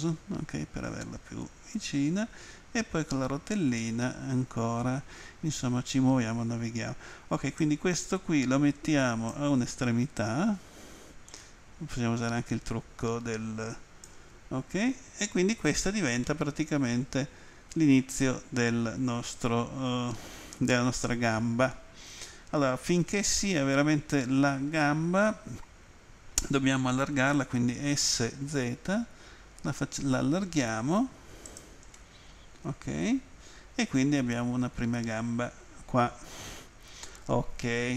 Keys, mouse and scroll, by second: 1.9 scroll up 1, 2.7-3.1 scroll up 1, 3.8 shift+middle click, 5.2 scroll up 1, 7.6 click, 10.2 click, 16.3 middle click, 28.4 z, 31.5 click, 32.0 middle click.